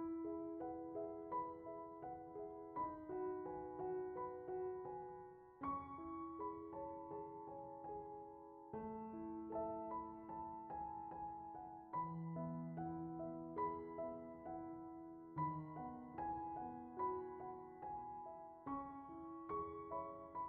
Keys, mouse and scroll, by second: 0.7 click, 3.3 click, 4.3 click, 8.8-9.6 drag, 10.0-10.9 middle drag, 11.1-17.2 drag, 19.3 click.